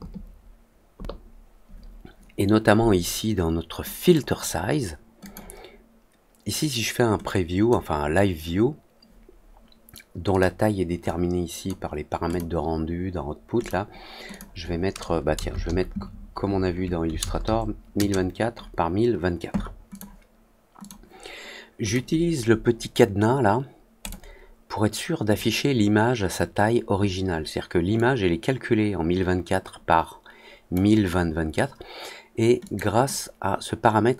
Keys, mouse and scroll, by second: 3.9 click, 5.1 click, 7.2 click, 10.2 click, 11.0-11.6 drag, 12.2 click, 13.5 click, 14.2 click, 19.8 click, 20.7 click, 21.8 click, 23.9 click, 27.9-30.7 drag, 32.5 click.